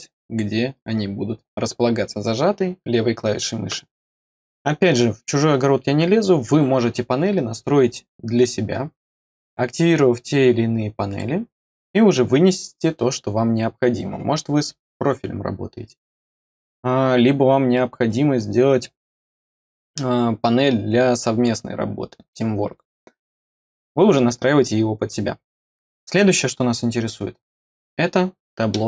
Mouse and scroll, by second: 8.3 click, 9.3 click, 11.0 click.